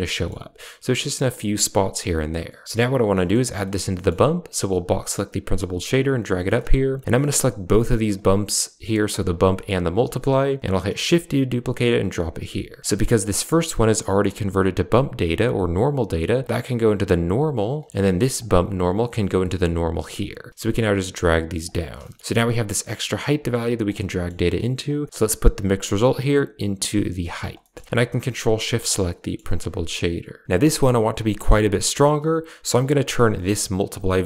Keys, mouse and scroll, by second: 0.0 shift+scroll down 1, 0.2 shift+middle click, 1.8 click, 3.1 middle click, 3.5 middle click, 3.8 middle click, 4.8 click, 5.6 g, 6.4 middle click, 7.0 right click, 8.0 shift+right click, 9.6 shift+click, 10.8 shift+d, 12.8 middle click, 16.4-17.7 drag, 18.3 click, 18.9-20.1 drag, 20.5 click, 20.7 g, 21.9 middle click, 22.2 a, 22.7-23.8 drag, 24.0 middle drag, 24.7 click, 25.6-27.3 drag, 27.5 middle click, 28.8 ctrl+shift+click, 29.1 middle click, 30.5 middle click, 32.5 ctrl+v, 33.2 middle drag, 33.7 drag, 34.0 middle drag.